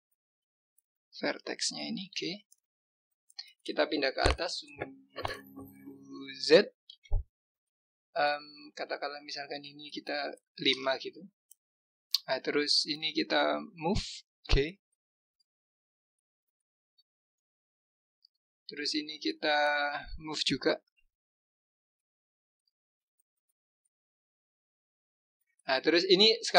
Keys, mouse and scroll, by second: 0.2 click, 1.9 g, 12.2 click, 13.0 click, 14.3 g, 18.0 click, 19.1 click, 21.7 g.